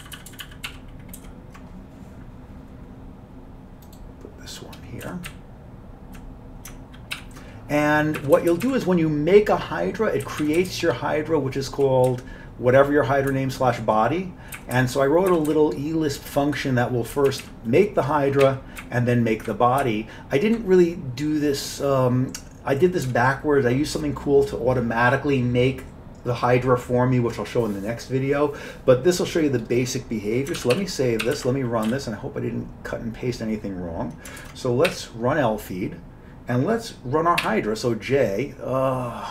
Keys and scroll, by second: 0.1 ctrl+n, 0.2 ctrl+n, 0.4 ctrl+n, 0.8 ctrl+w, 1.3 ctrl+y, 5.1 Down, 5.4-6.3 Down, 7.2 ctrl+y, 8.3 Up, 8.4 Up, 8.6 Up, 8.7 Up, 10.3 Down, 10.5 Down, 10.7 Down, 10.8-12.0 Right, 12.2-12.9 Left, 13.4 Right, 13.9 Right, 14.0 Right, 14.7 Up, 14.8 Up, 15.4 Up, 15.6 Up, 17.2 Down, 17.4 Down, 17.5 Down, 18.5 Down, 18.9 Up, 19.4-20.6 Up, 30.6 ctrl+x, 30.8 ctrl+s, 31.3 ctrl+c, 31.4 ctrl+c, 32.0 y, 34.5 ctrl+1, 35.0 e.